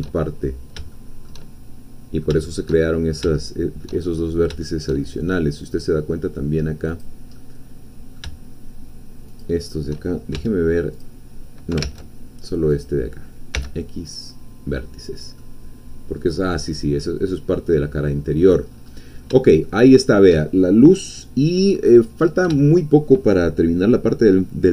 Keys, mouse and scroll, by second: 0.8-2.4 shift+middle drag, 2.6 shift+middle click, 2.9-3.4 shift+scroll up 1, 3.4 shift+middle click, 4.1-4.6 shift+scroll up 4, 4.6-6.9 shift+middle drag, 6.9 click, 7.4-9.3 middle drag, 9.3 shift+click, 10.3 shift+x, 10.9 click, 11.9 ctrl+z, 12.8 click, 13.5 x, 14.1 click, 15.4 middle click, 16.5-17.0 scroll down 2, 17.0-18.7 middle drag, 18.7-19.3 scroll up 2, 19.6-20.8 shift+middle drag, 22.2 scroll up 2, 22.6-24.7 shift+middle drag.